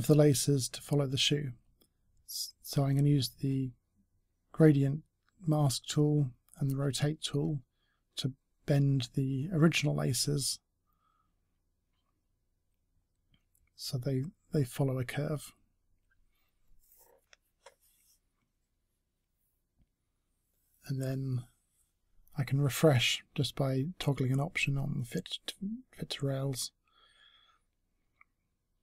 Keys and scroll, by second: 3.7-4.5 typing, 19.1 space.